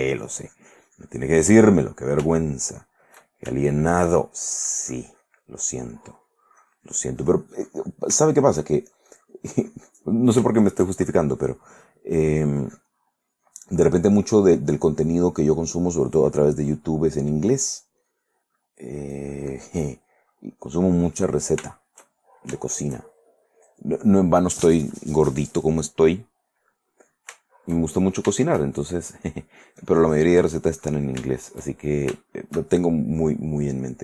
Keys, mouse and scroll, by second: 2.5 shift+middle click, 3.2 shift+middle click, 3.8 shift+middle click, 4.6-6.6 shift+drag, 6.7-8.3 drag, 8.4 shift+middle click, 9.1-10.6 shift+drag, 10.7 shift+middle click, 11.4-15.8 shift+drag, 16.0 click, 16.9 middle click, 17.8 click, 18.2 click, 19.3 click, 20.2-21.7 drag, 21.8 shift+middle click, 22.8 shift+middle click, 24.1-25.1 drag, 25.8 click, 26.0 click, 26.6 click, 27.2-29.2 shift+middle drag, 29.4-31.3 shift+drag, 31.6 shift+click, 32.1 shift+middle click, 32.2 shift+click, 33.2 shift+click, 33.7 click.